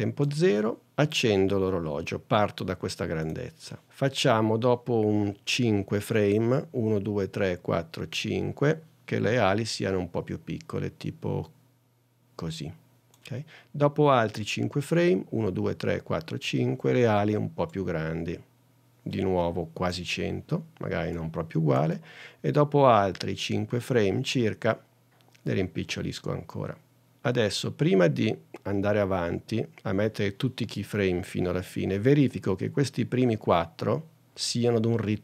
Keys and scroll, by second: 6.9 super+Right, 15.5 super+Right.